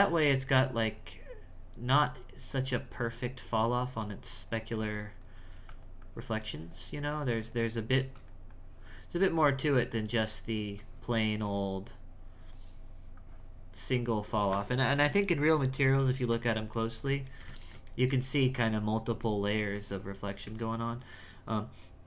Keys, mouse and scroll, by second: 0.0-5.5 drag, 6.0-8.0 drag, 8.5-16.2 drag, 16.6-19.7 ctrl+middle drag, 19.7 Tab, 20.4 z.